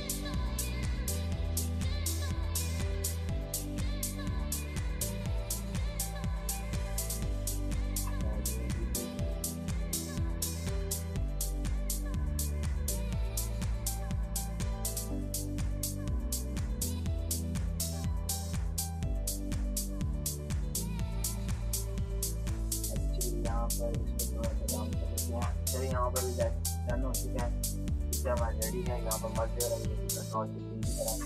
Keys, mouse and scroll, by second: 10.7 click, 15.4 click, 22.1-24.8 drag, 25.1 ctrl+-, 25.9 ctrl+shift+e, 26.8 ctrl+-.